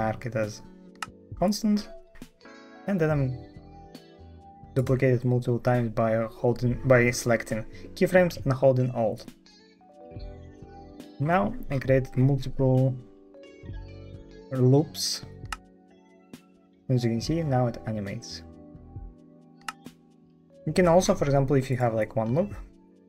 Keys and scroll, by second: 15.4 space, 19.5 space.